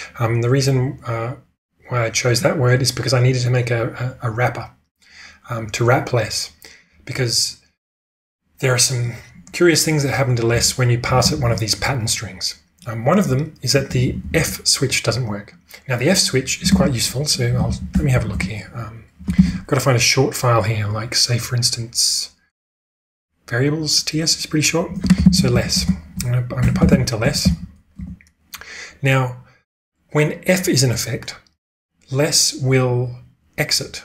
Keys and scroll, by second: 10.5-11.4 typing, 13.2-14.3 typing, 16.8 ctrl+space, 17.4-19.7 typing, 24.9-28.7 typing.